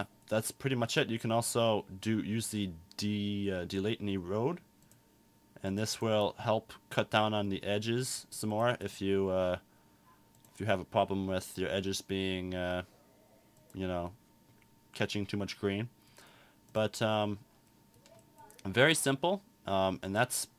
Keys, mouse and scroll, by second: 20.2-20.5 drag.